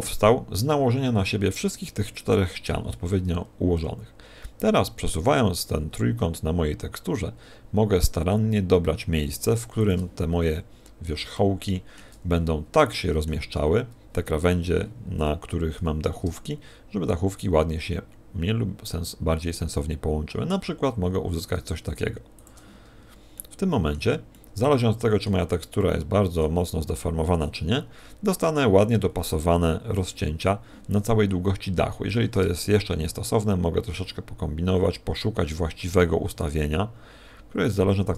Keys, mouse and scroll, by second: 3.8 g, 10.1 shift+click, 10.3-11.3 scroll up 6, 11.3 shift+middle click, 11.3 scroll up 1, 12.3 scroll up 1, 12.9 shift+middle click, 15.8 g, 22.7 shift+click, 22.9-23.5 scroll down 3, 23.3 middle click, 24.3 middle click, 25.8 middle click, 27.0 middle click, 32.1 g.